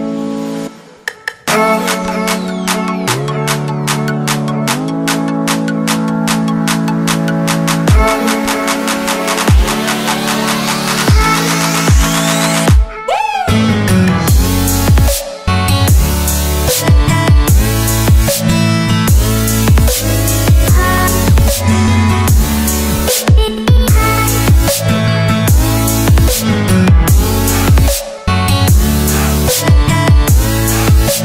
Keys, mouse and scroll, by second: 0.8 click, 14.7 Delete, 16.3 click, 17.0 Delete, 17.8 click, 18.2 Delete, 19.0 click, 19.3 Delete, 20.0 click, 20.7 Delete, 22.0 click, 22.4 Delete, 23.7 click, 24.1 Delete, 25.6 scroll down 1, 26.2 scroll up 1, 27.2 shift+click, 28.6 ctrl+g, 30.9 click.